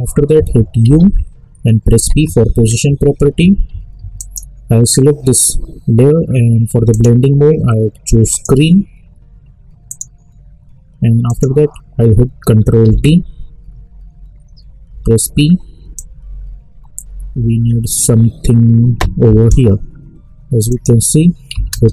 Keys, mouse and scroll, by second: 1.9 p, 4.2 click, 6.9 click, 12.8 ctrl+d, 14.9 p, 15.9-20.7 drag.